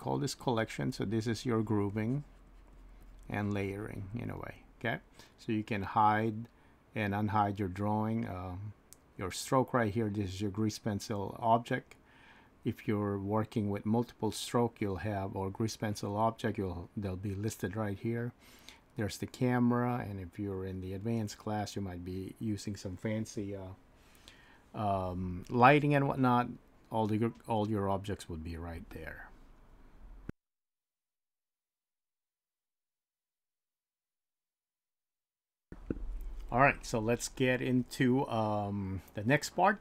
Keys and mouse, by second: 0.2 click, 1.5-4.8 drag, 6.5 click.